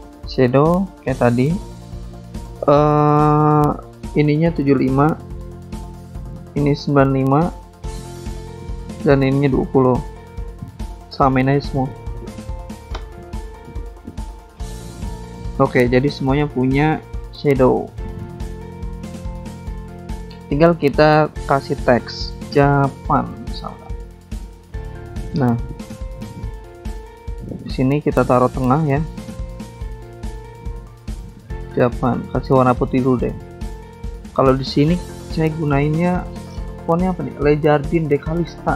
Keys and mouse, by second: 0.8 click, 2.9 click, 3.6 click, 6.3 click, 6.4 click, 7.1 click, 7.3 click, 9.3 click, 9.4 click, 10.0 click, 10.1 click, 12.3 click, 12.8-13.6 typing, 14.7 click, 14.8 click, 14.9 click, 15.0 double click, 15.1 double click, 15.2 double click, 15.3 double click, 15.4 double click, 15.8 double click, 15.9 double click, 15.9 double click, 16.0 double click, 16.1 double click, 16.2 double click, 18.2 click, 18.6-20.1 typing, 20.1 Return, 22.2 click, 24.5 click, 25.0 click, 25.6 click, 27.4 click, 27.6 click, 27.9 click, 28.0 double click, 28.5 Caps_Lock, 29.1-30.3 typing, 31.5 click, 32.1 click, 32.2 click, 32.8 ctrl+z, 33.1 click, 34.8 click, 34.8 click, 34.9 click, 35.0 double click, 35.1 click, 35.2 click, 35.3 click, 35.4 double click, 35.5 double click, 35.6 double click, 36.8 double click, 38.3 click.